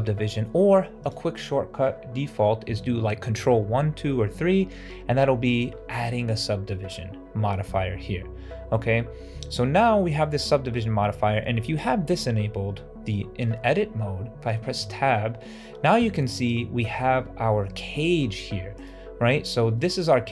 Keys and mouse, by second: 5.4 ctrl+1, 9.4 middle click, 14.4 middle click, 14.7 Tab, 16.3 right click, 17.7 middle click, 18.6 alt+right click, 19.6 middle click, 20.2 shift+middle click.